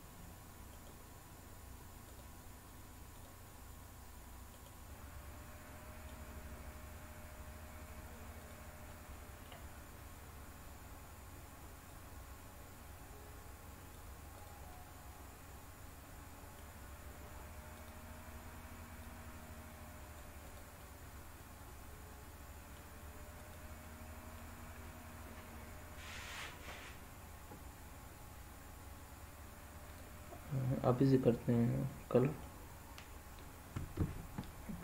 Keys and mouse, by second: 0.8-1.2 right drag, 2.0 click, 4.6 right click, 4.8-6.0 middle drag, 8.9 middle click, 11.9-13.9 drag, 14.6-16.6 middle drag, 17.7 click, 19.1-20.2 drag, 20.4 click, 20.8-22.7 middle drag, 23.8 middle click, 31.9 middle click.